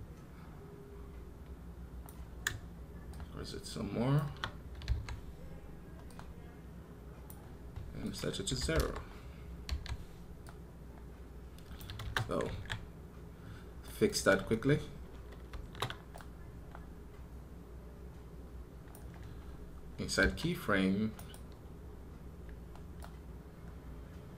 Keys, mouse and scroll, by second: 21.0 right click.